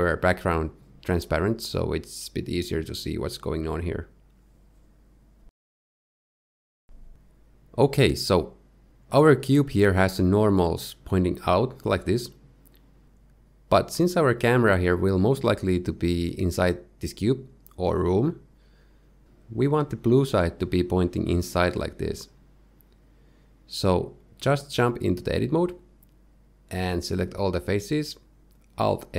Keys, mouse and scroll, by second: 0.2 scroll down 1, 3.1-4.0 scroll down 1, 4.0 click, 4.0-5.1 scroll down 2, 5.1 click, 5.1-5.6 scroll down 1, 5.6 click, 8.4 click, 25.5 Tab, 27.7 a, 27.9 a, 28.4 a.